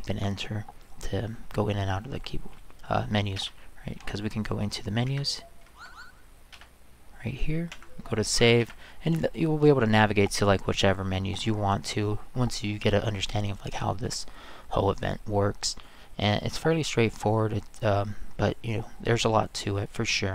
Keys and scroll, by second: 3.4 Return, 5.1 Escape, 5.6 Right, 6.5 Return, 7.7 Escape, 8.2 Left, 8.6 Return.